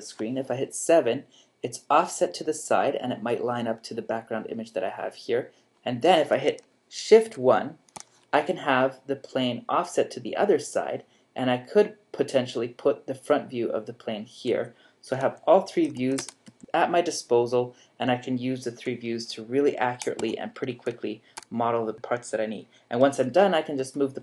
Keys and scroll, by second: 0.5 7, 5.7 3, 7.2 shift+1, 15.2 3, 16.5 7, 18.7 3, 20.7 shift+1, 23.8 g.